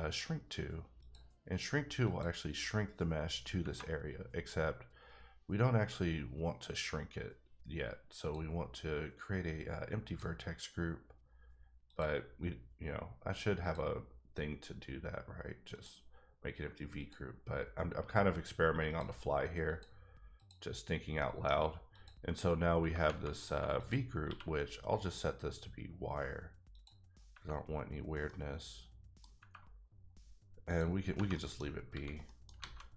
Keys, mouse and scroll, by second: 1.0 click, 2.5 click, 3.6 Tab, 10.1 click, 11.9 click, 13.6 click, 14.4-15.7 scroll up 2, 15.7 click, 17.0 click, 19.7 click, 20.4 click, 21.0 scroll down 1, 21.2 middle click, 21.9 click, 22.8 Tab, 23.0 Tab, 23.8 click, 24.2 q, 26.7 click, 27.3 Tab, 28.2 middle click, 30.6 click, 31.3 middle click, 31.8 scroll up 1, 31.9 a, 32.2 middle click, 32.6 alt+a.